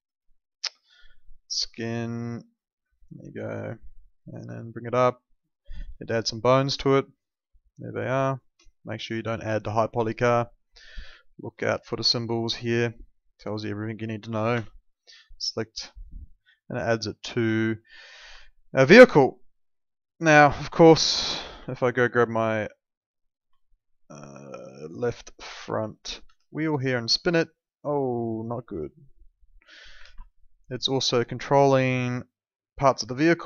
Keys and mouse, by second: 8.3 shift+click, 11.4 ctrl+2, 11.4 @, 14.5 Escape, 15.7 click, 17.5 alt+middle click, 18.3 alt+middle click, 19.2 alt+middle click, 21.0 alt+middle click, 21.7 alt+middle click, 22.9 click, 25.0 alt+middle click, 26.2 e, 27.0 click, 28.8 alt+middle click, 30.0 ctrl+z, 30.9 click.